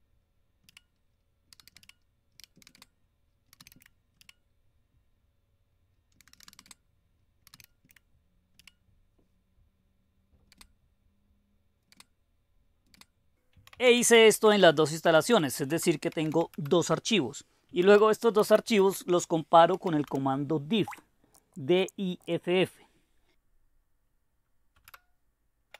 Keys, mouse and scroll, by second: 0.7 Return, 1.4-4.7 typing, 5.9-8.6 typing, 10.5 space, 12.0-22.3 typing, 24.8 Return, 24.9-25.7 typing.